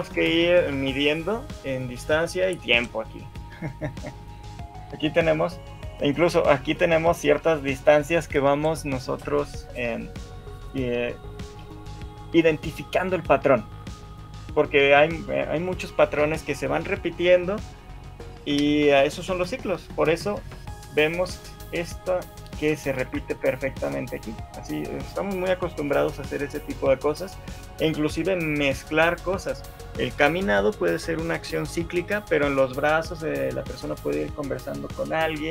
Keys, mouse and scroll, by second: 4.7 right click, 20.9 right click, 23.2 shift+Left, 23.4 alt+a.